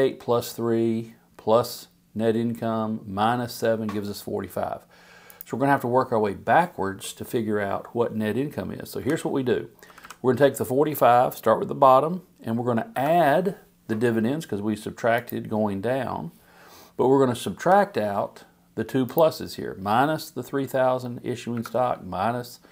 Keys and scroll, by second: 9.0 =, 9.9 Down, 17.6 -, 21.5 -.